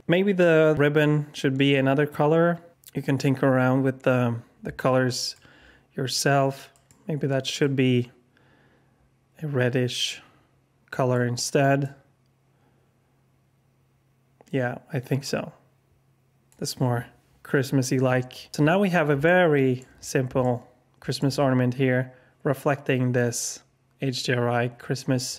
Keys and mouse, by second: 6.7 click, 11.8-16.6 drag, 19.2-19.7 alt+shift+drag, 20.4 alt+shift+click.